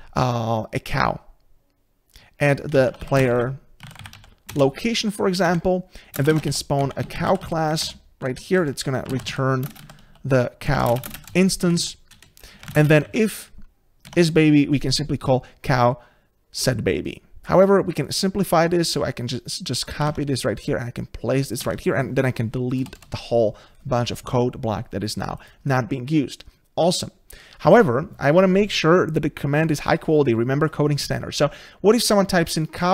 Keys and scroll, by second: 4.5 Return, 14.1 Tab, 20.1 ctrl+c, 25.6 ctrl+v.